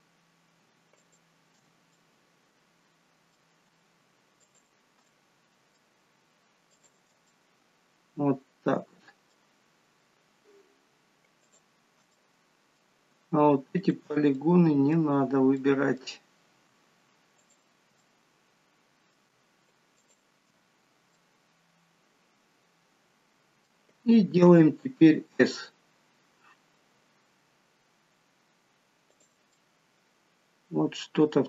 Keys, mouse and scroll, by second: 0.2-0.5 scroll up 2, 1.0 alt+shift+click, 1.9 middle click, 4.4 alt+shift+click, 6.7 alt+shift+click, 7.3 middle click, 9.5 scroll up 5, 10.1 scroll down 1, 11.4 shift+click, 12.2 middle click, 13.8 shift+click, 14.4 middle click, 15.1 scroll down 3, 15.6 middle click, 16.3-16.7 scroll up 1, 17.4 shift+click, 17.4-17.9 scroll up 1, 18.1 middle click, 20.0 shift+click, 20.7-21.0 scroll down 2, 21.2 middle click, 25.3 s, 29.6 middle click.